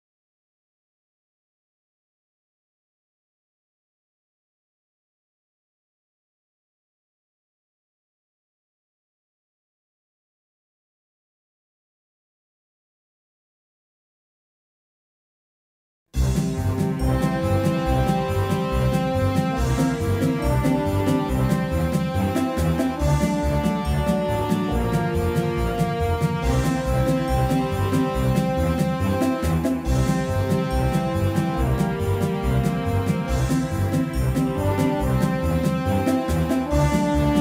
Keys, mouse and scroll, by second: 5.8-7.3 drag, 7.6 middle click, 10.7-11.7 right drag, 11.7-17.4 middle drag, 18.4-19.6 right drag, 19.6-21.6 middle drag, 23.0 x, 24.7-27.2 middle drag, 31.6-34.7 middle drag, 34.3-35.7 right drag, 35.7-37.4 middle drag.